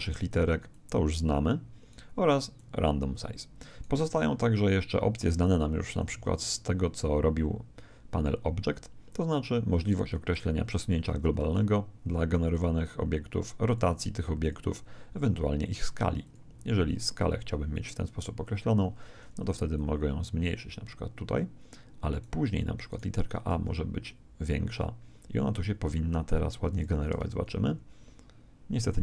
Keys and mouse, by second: 0.7 click, 11.5-16.0 drag, 16.2 click, 22.9 right click, 23.5 s, 26.7 click, 27.1 alt+a.